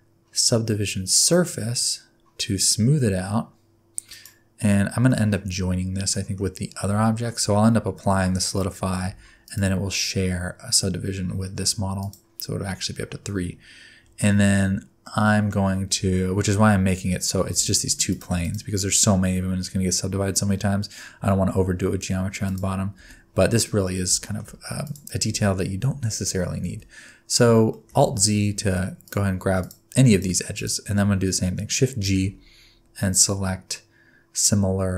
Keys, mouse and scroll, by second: 4.1 click, 5.1 middle click, 6.1 middle click, 6.5 scroll down 1, 7.0 shift+middle click, 9.1 Tab, 9.4 click, 12.0 click, 13.8-15.0 scroll up 1, 15.0 middle click, 15.9 Tab, 16.5 alt+z, 16.8-17.5 scroll up 2, 17.5 3, 17.6 click, 18.1 click, 18.4 shift+click, 18.7-19.6 scroll down 2, 19.6-19.9 scroll down 1, 20.8-21.1 scroll up 1, 21.5 2, 22.4 click, 22.9 alt+z, 24.2 shift+middle click, 24.8 click, 25.3 alt+z, 25.8 alt+z, 26.7 alt+z, 27.7 shift+middle click, 28.0 alt+z, 28.3 alt+z, 28.6-29.0 scroll up 2, 29.0 click, 29.6 click, 30.1 click, 30.5 click, 32.0 shift+g.